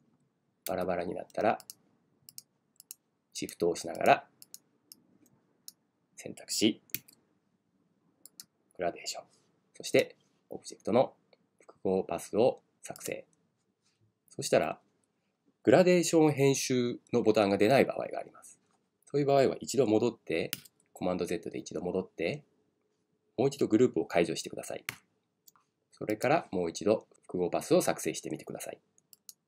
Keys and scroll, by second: 0.7 super+z, 6.9 super+z, 20.6 super+z.